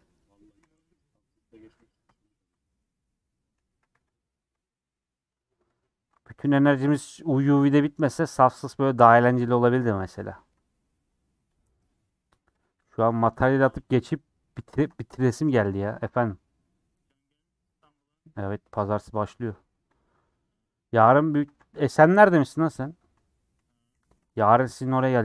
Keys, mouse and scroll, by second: 0.2 click, 0.6 c, 2.0 ;, 2.3 scroll down 3, 2.4-3.6 middle drag, 3.6 a, 4.1 u, 4.6 middle click, 5.0 scroll up 2, 5.3 3, 5.4 middle click, 5.8 scroll up 1, 7.7 ;, 8.5 scroll down 4, 8.7 middle click, 9.0 scroll up 1, 9.1 scroll down 1, 9.1-9.6 scroll up 3, 9.6-11.6 middle drag, 11.6 Left, 12.6 ctrl+Left, 13.3 ctrl+z, 14.2 ctrl+Left, 14.8 ctrl+Left, 15.0 middle click, 15.6 ctrl+Left, 16.1-17.2 middle drag, 17.2 Left, 17.8 Left, 19.0 ctrl+Left, 19.6 ctrl+z, 20.0 ctrl+Left, 20.6 ctrl+Left, 21.1 ctrl+Left, 21.5 a, 22.3 u, 22.6-23.9 middle drag, 23.9 /, 24.3 Tab, 24.6 h, 24.9 Left.